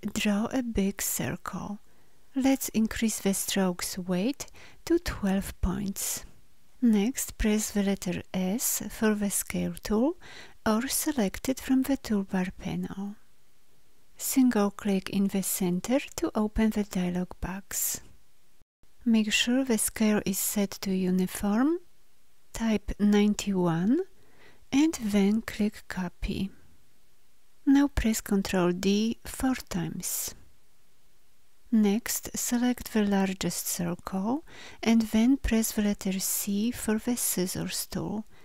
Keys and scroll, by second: 8.3 s, 28.1 ctrl+d, 31.9 v, 36.0 c.